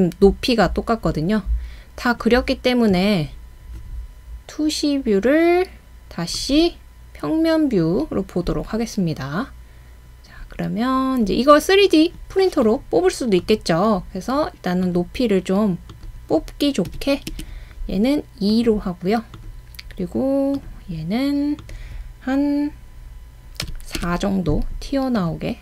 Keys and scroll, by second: 3.9-4.6 typing, 8.5-9.2 typing, 16.9-17.3 typing, 23.7-24.0 typing.